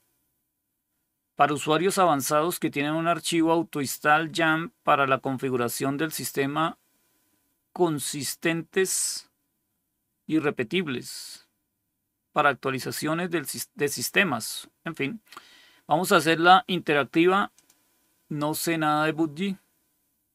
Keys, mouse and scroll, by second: 17.4 click.